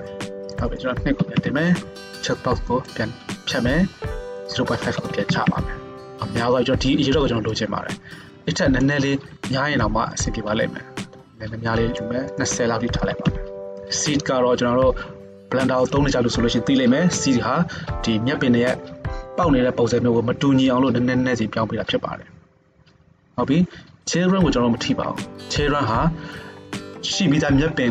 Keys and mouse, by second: 0.4 middle click, 0.7-2.9 drag, 2.9-4.5 middle drag, 4.5-27.9 drag.